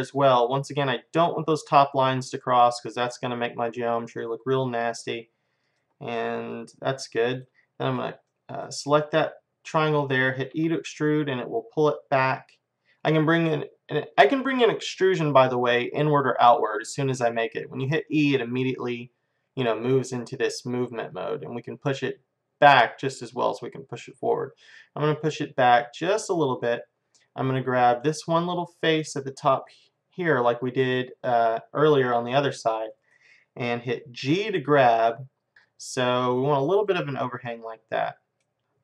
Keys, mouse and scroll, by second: 6.2-7.9 middle drag, 7.9-9.7 drag, 9.7-12.3 middle drag, 10.6 e, 26.6-28.0 middle drag, 28.0-30.0 drag, 30.6 middle click, 31.4-34.8 middle drag, 34.3 g, 35.6 middle click, 36.6 middle click, 37.5 middle click, 37.9 middle click, 38.2 middle click, 38.6 middle click.